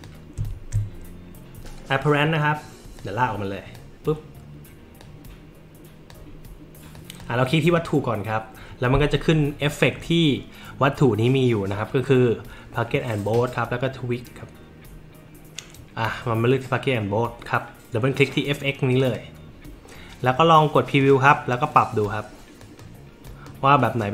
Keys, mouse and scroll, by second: 1.5 middle click, 3.0 click, 5.0-6.1 drag, 6.9 click, 7.7 click, 18.9 click, 19.1 click, 21.0 click, 21.8 click, 22.6 click, 23.3 click, 23.8 click.